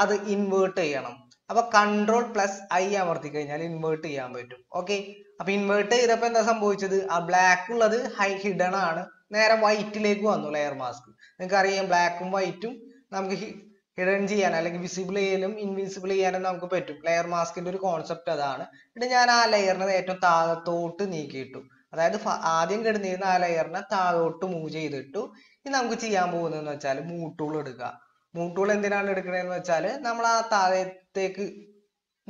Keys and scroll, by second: 1.6 ctrl+i.